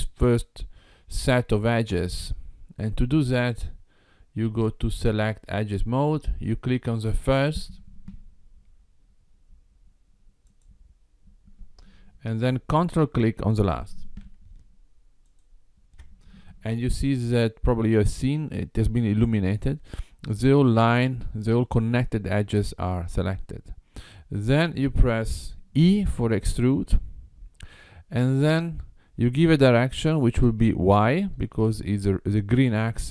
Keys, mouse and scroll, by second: 5.3 click, 10.5 click, 15.3 ctrl+click, 26.9 e.